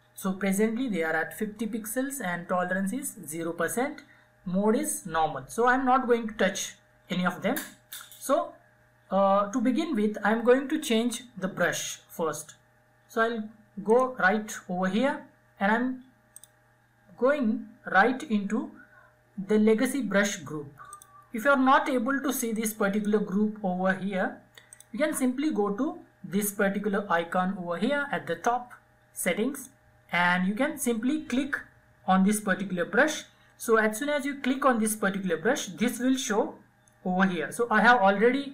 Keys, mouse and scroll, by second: 12.6 click, 15.0 click, 19.6-23.4 drag, 28.2 click.